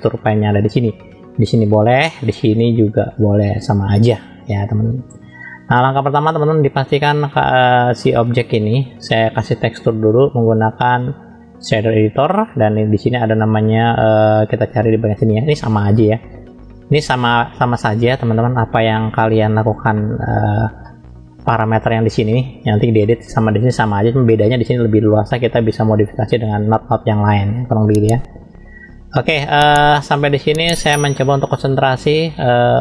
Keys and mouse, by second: 2.6-5.0 drag, 5.9-6.4 middle drag, 7.9 click, 11.8 click, 15.3 click, 17.0 click, 19.1 shift+middle click, 20.1 shift+middle click, 21.0 middle click, 29.2-30.2 drag, 31.3 shift+middle click.